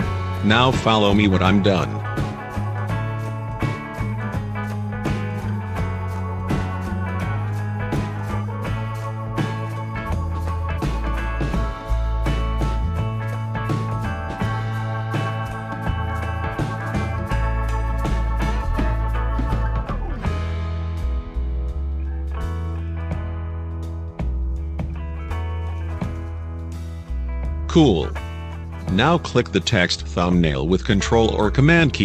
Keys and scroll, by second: 4.1 7, 4.7 0, 5.2 5.